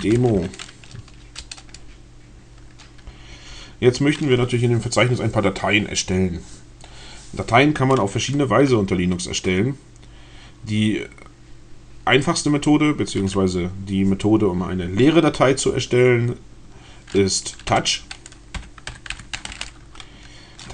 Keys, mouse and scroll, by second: 0.0-0.8 typing, 1.1 Return, 17.7-20.7 typing.